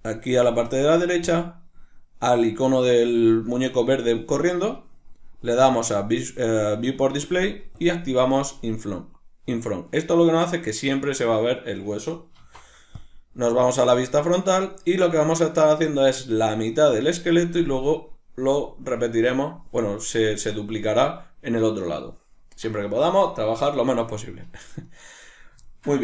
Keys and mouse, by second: 1.2-5.3 drag, 5.8-11.8 drag, 11.8-24.8 shift+middle drag, 12.4 alt+o, 24.8 right click, 25.7-26.0 shift+middle drag.